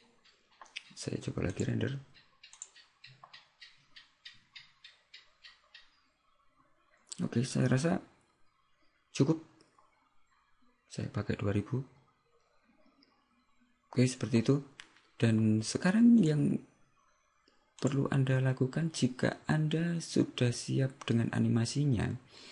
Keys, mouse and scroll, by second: 18.0 click.